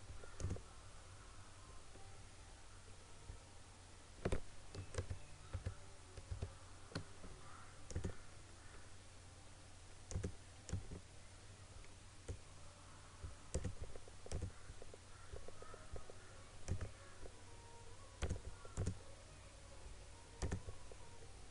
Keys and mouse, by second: 4.7 click, 4.9 ctrl+-, 6.4 ctrl+-, 8.0-13.5 drag, 16.7-21.5 drag.